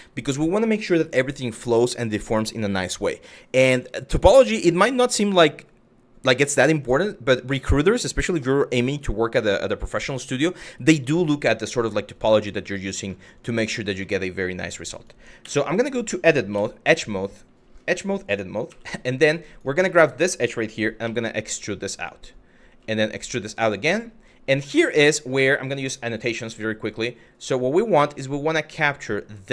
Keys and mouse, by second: 11.7 click, 12.8 shift+middle click, 13.7 shift+middle click, 14.6 click, 15.1 Tab, 16.1 2, 18.3 w, 19.5 middle click, 20.7 e, 21.6 click, 22.3 e, 24.3 middle click, 26.6 click.